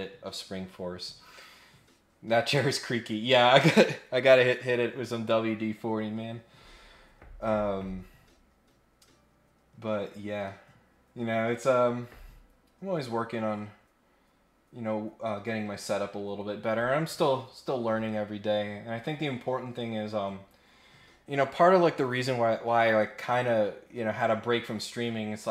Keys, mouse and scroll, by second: 9.9 scroll up 1, 13.4 scroll up 1.